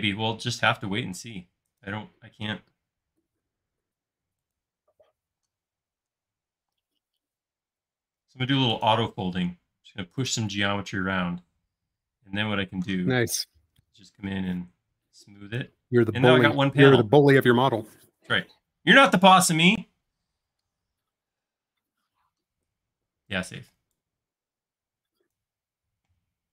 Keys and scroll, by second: 5.4 m, 6.1 Escape, 6.6 m, 10.9 space, 12.7 e, 14.2 typing, 16.3 space.